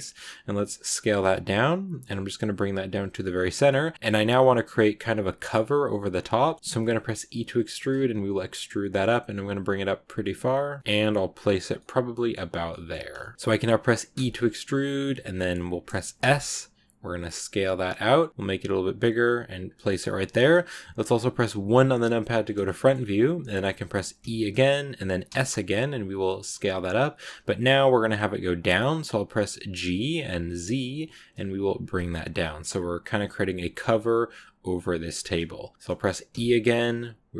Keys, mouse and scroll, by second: 3.9-6.1 scroll up 1, 6.1 scroll down 1, 6.3 shift+middle click, 6.5 scroll up 2, 6.6 s, 11.5 scroll down 1, 11.6 scroll up 1, 11.6 scroll down 1, 11.7-13.3 middle drag, 13.3-14.0 scroll up 1, 14.0 e, 21.6 KP_1, 22.3 click, 22.6 shift+middle click, 22.8 shift+scroll up 2, 24.1 e.